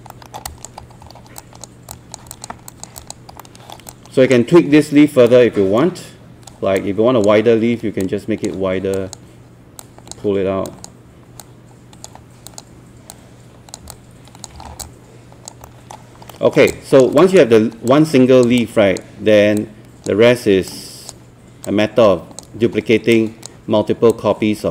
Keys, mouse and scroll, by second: 0.1 alt+middle click, 0.5 alt+click, 0.8-1.4 scroll up 2, 1.4 alt+click, 1.9 alt+click, 2.3 alt+click, 2.7 alt+click, 3.4 alt+middle click, 3.9 alt+click, 5.3 right click, 6.8-13.8 drag, 13.9 alt+click, 14.6 scroll down 1, 14.8 alt+click, 15.9 alt+middle click, 16.3 alt+middle click, 16.7 alt+click, 17.2 alt+click, 17.9 alt+click, 18.6-24.1 drag.